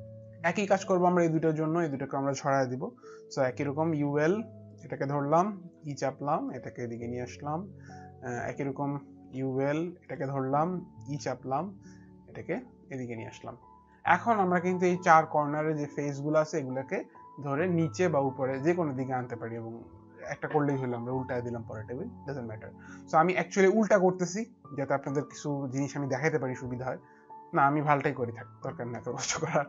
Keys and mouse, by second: 3.7-4.5 typing, 4.7 click, 5.7 e, 6.5 click, 9.3-11.1 typing, 9.5 click, 9.9 click, 11.9 click.